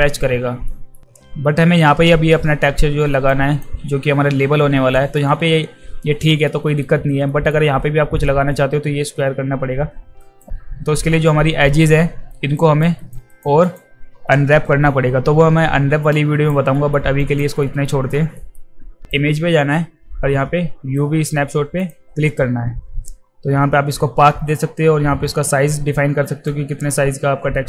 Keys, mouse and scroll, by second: 0.7 alt+middle drag, 3.3-3.6 alt+drag, 4.9 alt+middle drag, 6.5-6.8 alt+middle drag, 7.3 alt+middle drag, 10.2 alt+right click, 12.5 alt+right click, 13.0 alt+right click, 13.3 alt+right click, 13.6 alt+right click, 16.1-16.5 alt+right drag, 16.8 alt+middle drag, 17.2 alt+drag, 19.0 click, 21.8 click, 26.5-26.9 drag.